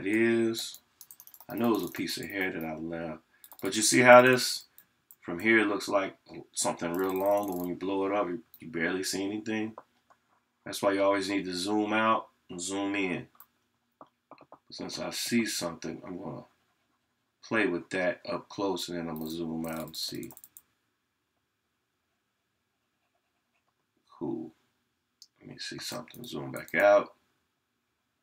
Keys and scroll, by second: 4.4 scroll up 1, 4.5 scroll down 1, 4.7 scroll up 1, 6.9 scroll down 1, 7.0 scroll up 1, 7.1 scroll down 1, 7.1 scroll up 1, 7.2 scroll down 1, 7.2 scroll up 1, 7.3 scroll down 1.